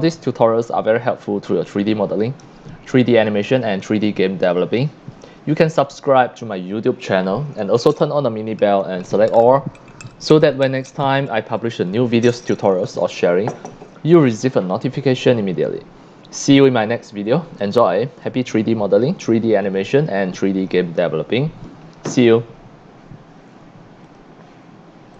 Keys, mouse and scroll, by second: 2.1 scroll down 2, 2.7 scroll up 1, 3.5 x, 3.6-4.5 drag, 4.0 c, 6.9 click, 24.0 click, 25.1 click.